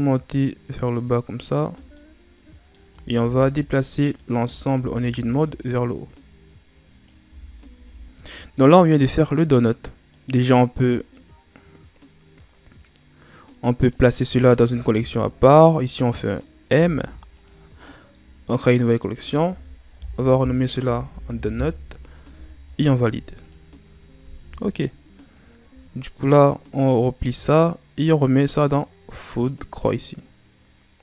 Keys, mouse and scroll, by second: 1.9 middle click, 2.8 a, 3.1 a, 4.0 right click, 4.4 Tab, 4.6 a, 5.0 a, 5.8-7.2 drag, 7.2 Tab, 7.6 a, 7.9 scroll down 1, 8.0 ctrl+s, 8.5 right click, 9.1-10.1 scroll up 2, 10.1 right click, 10.9 right click, 13.7 click, 14.3 shift+click, 16.6 m, 26.2 click, 27.9 click.